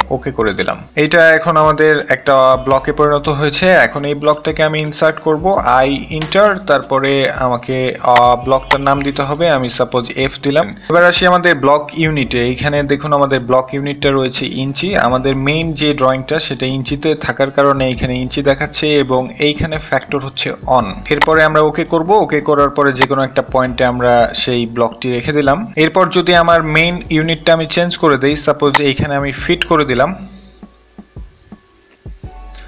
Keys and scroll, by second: 6.4-6.9 typing, 6.7 Return, 7.1 Return, 25.6-26.3 typing, 28.9-29.8 typing.